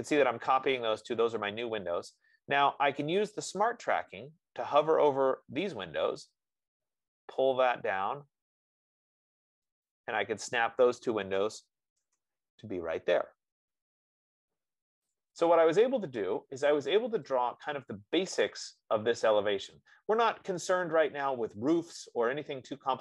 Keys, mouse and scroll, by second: 3.1 F15, 10.2-15.3 drag, 12.2 Return, 15.4 click, 16.6 middle click, 16.8 middle click, 18.7 click, 22.2-23.0 drag.